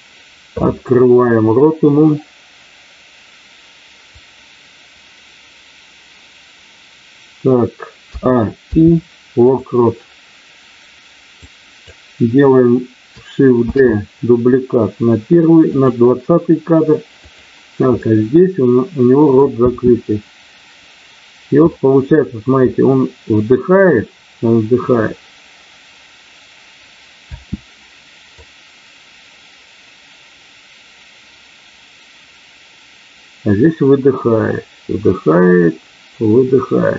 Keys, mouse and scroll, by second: 8.5 i, 11.4 click, 13.6 shift+d, 15.6 click, 17.3 click, 17.9-19.5 middle drag, 19.6 space, 21.5 middle click, 27.1 space, 28.3-36.9 drag.